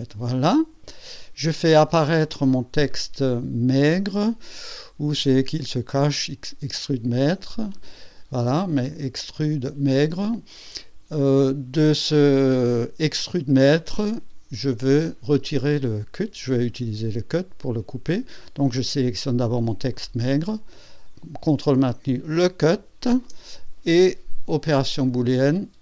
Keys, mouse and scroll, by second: 0.5 click, 6.1 click, 6.6 click, 6.6 space, 19.9 click, 20.4 click, 22.3 ctrl+click, 24.9 click, 25.3 click.